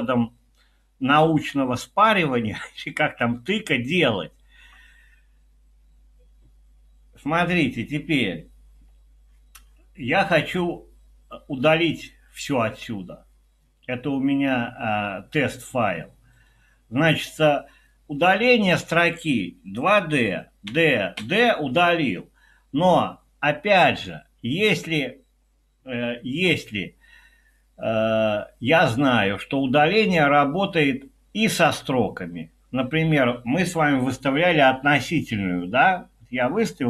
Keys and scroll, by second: 20.7-21.2 typing.